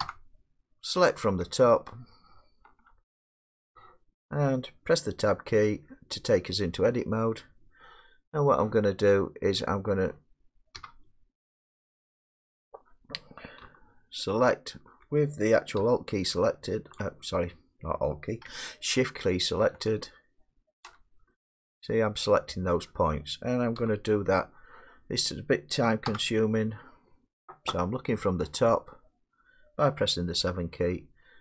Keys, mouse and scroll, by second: 0.0 7, 5.7 Tab, 10.1-12.4 middle drag, 10.8 1, 17.0 alt+click, 17.4-20.3 alt+drag, 20.9 shift+click, 23.1 middle click, 23.8 1, 26.1 7.